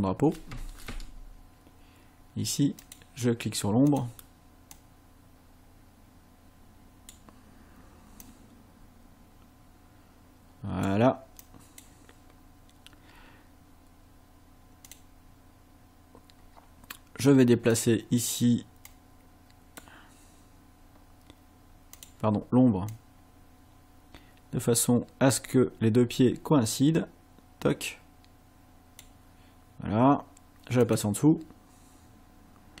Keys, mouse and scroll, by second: 0.9 Escape, 2.8 click, 3.9 click, 4.7-7.3 drag, 8.3-11.0 drag, 11.4 click, 14.9 click, 17.8 click, 18.9 click, 22.0 click, 22.9-29.2 drag, 30.8 click.